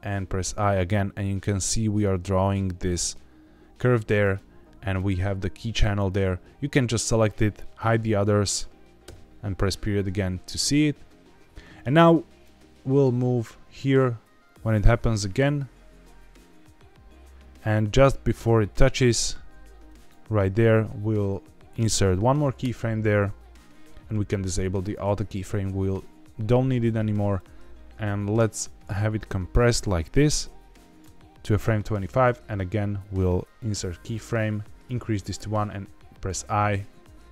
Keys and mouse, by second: 4.1 click, 4.8 click, 5.9 click, 7.7 click, 8.9 KP_Decimal, 12.4-20.0 drag, 20.0 middle click, 22.5 i, 24.7 click, 27.3-31.0 drag, 34.0 click.